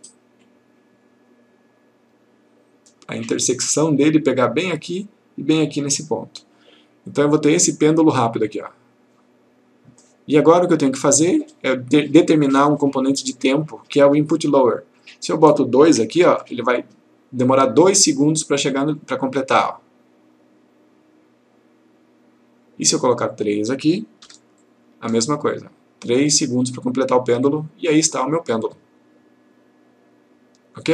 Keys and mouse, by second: 7.7 click, 15.1 click, 16.2 2, 19.1 click, 23.4 click, 24.3 3, 24.6 click.